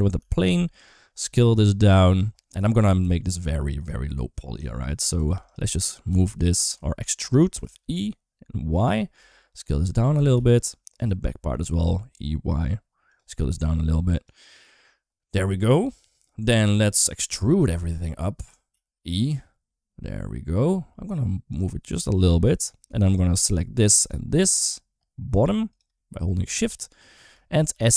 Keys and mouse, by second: 0.0 g, 1.0 s, 2.5 shift+middle click, 2.8 s, 4.4 shift+middle click, 4.9 Tab, 5.1 2, 5.3 click, 5.9 g, 7.3 e, 9.0 s, 10.0 g, 10.8 click, 11.3 e, 13.2 s, 16.3 middle click, 17.0 middle click, 17.5 a, 17.8 middle click, 18.5 e, 22.7 3, 22.9 click, 23.3 middle click, 25.8 middle click, 26.4 shift+middle click, 27.5 s.